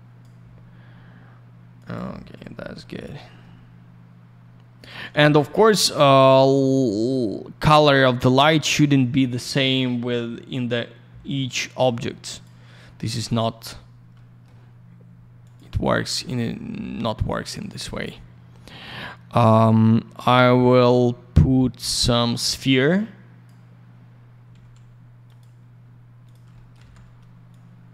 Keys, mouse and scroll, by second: 1.7 click, 1.9 click, 2.8 middle click, 3.4 middle click, 5.2 click, 5.3 click, 6.5 click, 6.6 click, 8.4 click, 12.3 click, 12.4 click, 13.7 scroll down 1, 14.1 alt+middle click, 15.4 click, 15.5 click, 17.5 click, 17.7 click, 20.3 click, 20.4 click, 21.8 click, 22.8 click, 24.5 alt+φ, 25.2 click, 25.3 click, 26.2 click, 26.3 click, 26.5 alt+middle click, 27.5 click.